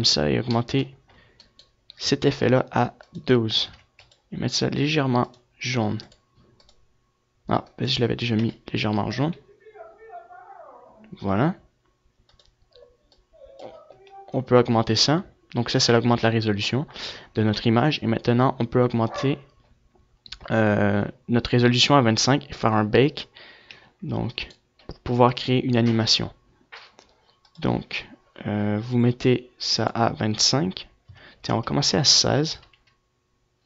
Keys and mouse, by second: 1.1 click, 2.1-4.9 right drag, 8.0 KP_0, 23.5 F11, 24.1 right click, 24.6-26.7 drag, 27.1-32.9 drag, 33.5 middle click.